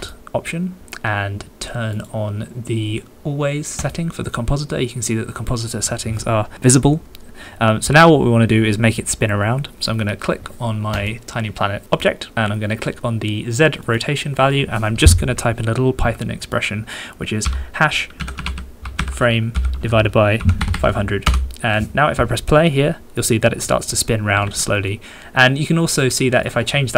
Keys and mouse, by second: 0.0 middle click, 2.0-4.8 middle drag, 10.9 middle click, 13.9-21.4 middle drag, 20.7 0, 23.1 middle click, 24.4 alt+a, 26.0-26.9 middle drag.